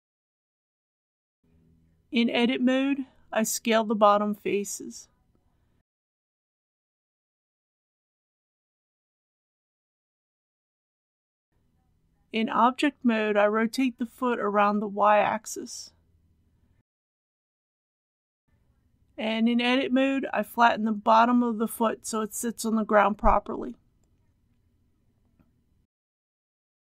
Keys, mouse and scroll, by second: 1.8 Tab, 3.2 click, 7.5 s, 10.1 click, 11.7 Tab, 12.2 Return, 13.1 r, 13.6 y, 15.0 KP_3, 15.2 KP_0, 20.0 Tab, 20.7 scroll up 1, 21.5 shift+middle click, 23.4 r, 24.7 y.